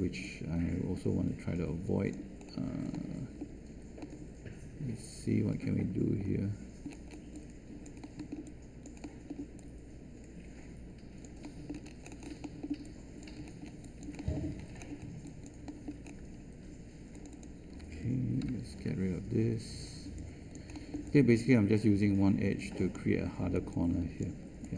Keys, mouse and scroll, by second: 18.4 ctrl+Delete.